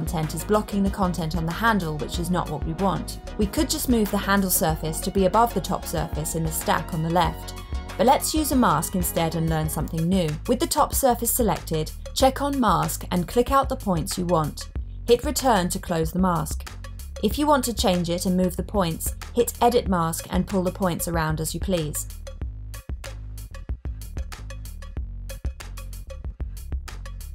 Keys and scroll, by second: 12.3 Return.